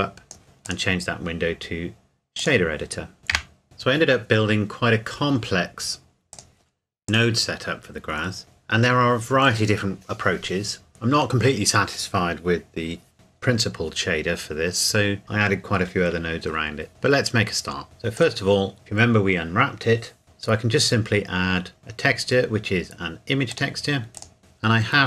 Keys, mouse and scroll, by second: 0.4 ctrl+s, 0.7 click, 3.2 scroll up 1, 3.3 n, 3.6 click, 6.3 click, 17.1-17.8 scroll up 1, 18.2 click, 23.5 click.